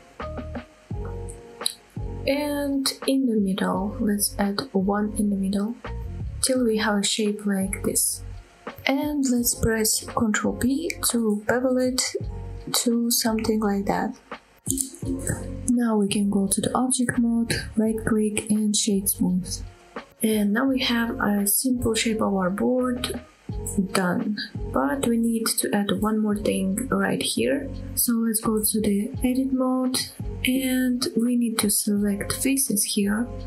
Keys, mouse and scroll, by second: 1.8 click, 2.1 middle click, 2.9 scroll up 1, 3.1 middle click, 5.3 ctrl+r, 6.3 right click, 6.7 middle click, 7.1 scroll up 1, 7.4 middle click, 8.0 middle click, 9.9 scroll down 1, 10.0 ctrl+z, 10.0 middle click, 10.3 ctrl+b, 14.9 click, 15.2-15.6 scroll down 1, 15.6 middle click, 16.5 middle click, 16.9 Tab, 17.5 middle drag, 18.1 right click, 19.9 scroll down 2, 20.2 middle drag, 20.6-21.2 scroll up 4, 21.2 shift+middle drag, 21.5 scroll down 1, 21.8-22.2 middle drag, 22.3 middle drag, 22.6-23.2 middle drag, 23.5-24.4 middle drag, 24.6 middle click, 25.0 middle drag, 25.7 shift+middle click, 29.1-29.5 middle drag, 29.7 middle click, 29.9 Tab, 30.7 middle click, 31.1 scroll up 1, 31.3 shift+middle click, 31.7 middle click.